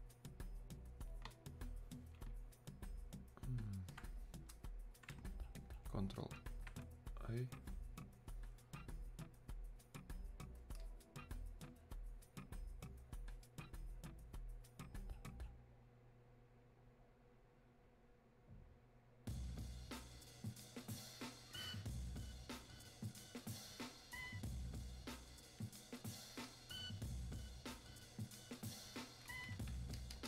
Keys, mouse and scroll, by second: 10.9-20.8 drag, 26.4-30.2 drag.